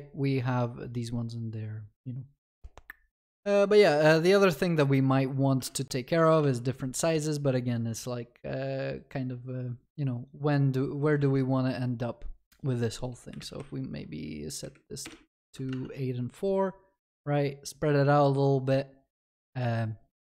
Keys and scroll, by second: 13.5 Delete, 15.4 Delete, 15.4 ctrl+s.